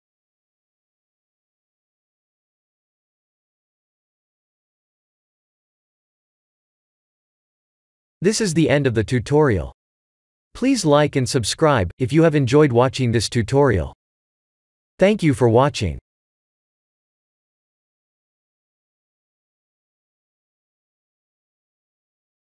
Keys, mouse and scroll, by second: 2.2 click, 5.5 click, 6.3 ctrl+s.